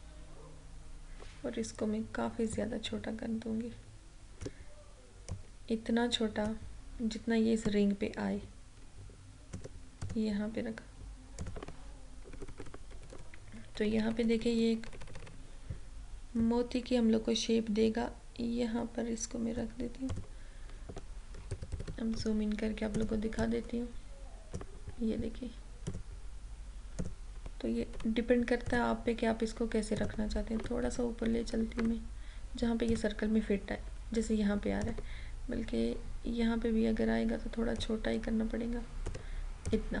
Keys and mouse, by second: 2.6-7.8 drag, 12.4 Right, 13.0 Down, 13.8 Left, 16.4-20.2 drag, 21.5 ctrl+=, 22.9-25.9 drag, 28.0 Left, 28.7 click, 30.5 Right, 30.8 Up, 31.8 Right, 32.9 click, 37.8-40.0 drag.